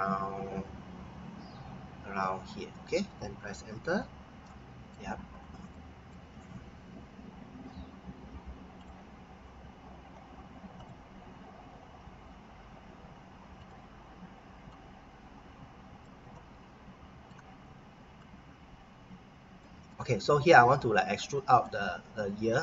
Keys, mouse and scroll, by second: 2.6 click, 3.8 Return, 4.4 middle click, 5.3-5.7 scroll down 1, 5.7 middle click, 8.8 click, 13.6 click, 16.3 middle click, 18.2 click, 19.8 middle click.